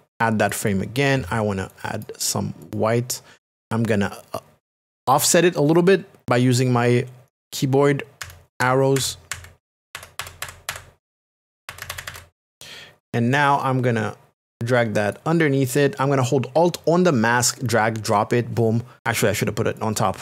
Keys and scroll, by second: 8.2 Right, 9.7 Up, 11.5 Right, 11.7 Up, 11.8 Right, 11.9 Up, 12.0 Right, 12.1 Up.